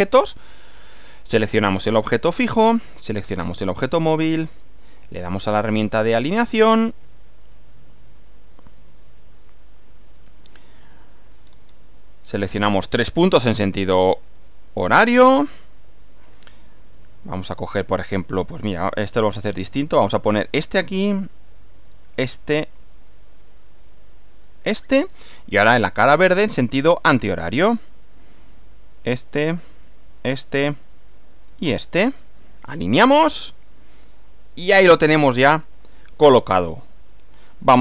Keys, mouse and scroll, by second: 1.2 click, 3.3 ctrl+click, 4.9 click, 6.4 click, 6.9 click, 8.2 click, 9.9 middle click, 10.9 shift+middle click, 11.5-11.9 shift+scroll up 2, 12.2-13.4 middle drag, 20.3 click, 22.1 click, 24.3 click, 25.3-26.4 middle drag, 28.9 click, 30.1 click, 31.4 click, 32.2 right click, 32.8 click, 34.5-35.7 middle drag, 37.1 click.